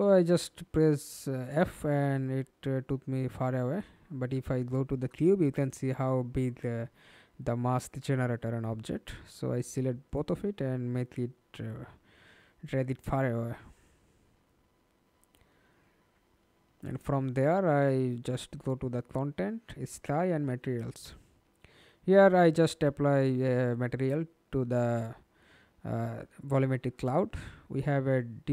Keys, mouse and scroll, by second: 3.8 scroll down 1, 4.2 alt+click, 6.3 ctrl+click, 7.2 w, 8.6 w, 8.8 shift+click, 12.5 alt+click, 13.8 middle click, 14.3 ctrl+space, 19.6 double click, 20.4 double click, 27.3-28.5 scroll down 8.